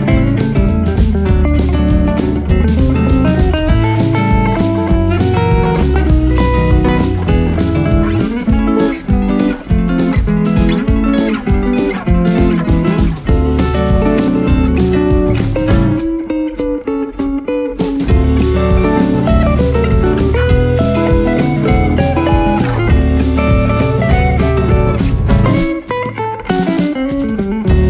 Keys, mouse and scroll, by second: 0.7 alt+scroll up 1, 1.4 alt+right click, 5.9 alt+scroll down 1, 7.0 alt+scroll down 1, 7.6 alt+scroll down 3, 10.9 double click, 11.4-12.9 typing, 14.6 right click, 15.6 typing.